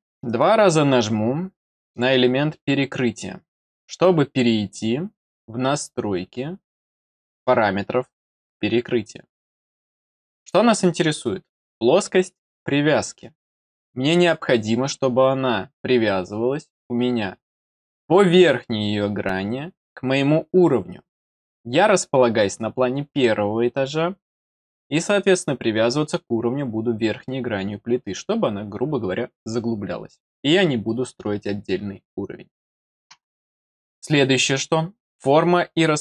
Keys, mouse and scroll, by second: 1.7 click, 35.4 click.